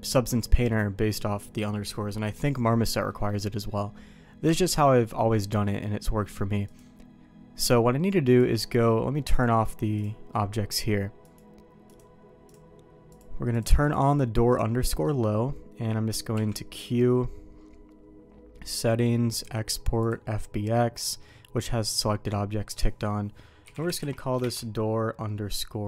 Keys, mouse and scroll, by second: 3.1 middle click, 8.3 click, 9.3 click, 11.2 click, 13.1 click, 13.8 click, 14.5 click, 14.9 middle click, 16.3 q.